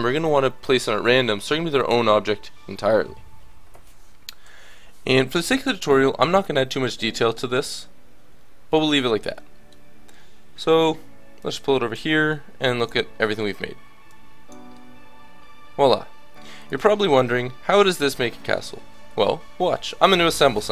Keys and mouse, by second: 5.9 Tab, 11.4-13.2 drag, 13.2-16.6 middle drag, 17.2-18.5 drag, 17.2-18.5 right drag, 18.0-20.4 middle drag.